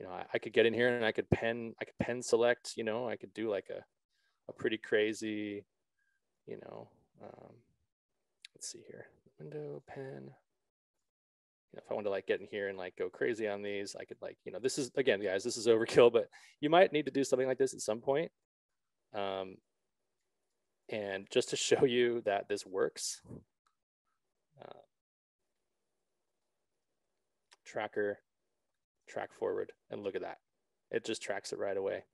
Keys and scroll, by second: 4.5 s.